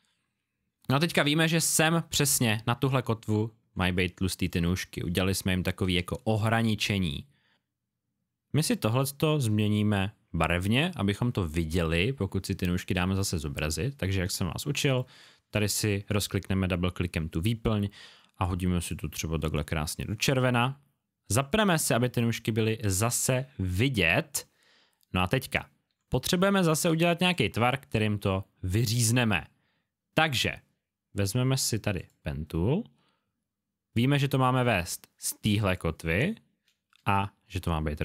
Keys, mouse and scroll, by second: 3.5 alt+scroll down 1, 3.8 space, 3.9 click, 8.6 click, 14.8 click, 21.4 click, 21.5 click, 25.3 alt+scroll down 1, 26.1 space, 26.2 click, 27.2 click, 28.1-31.1 alt+scroll up 1, 31.9 click.